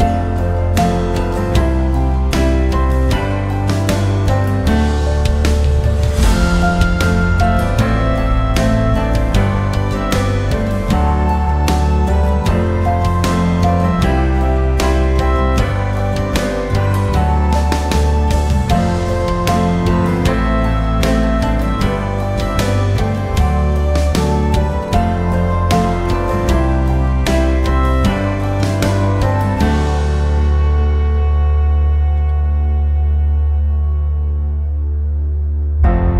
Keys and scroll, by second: 14.3 2, 15.5 0, 15.9 Return, 28.9 g, 29.4 Return.